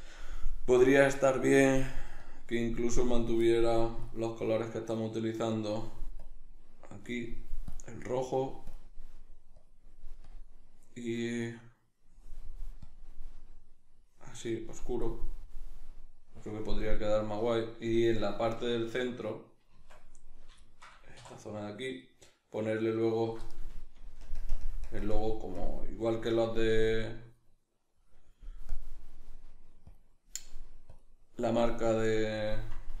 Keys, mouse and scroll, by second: 15.2-21.2 middle drag, 19.7 Tab, 21.2 3, 22.0 alt+right click, 23.0 alt+right click, 24.2 ctrl+KP_Add, 24.9 ctrl+KP_Subtract, 26.3 ctrl+KP_Add, 27.6 middle click, 28.7-33.0 drag.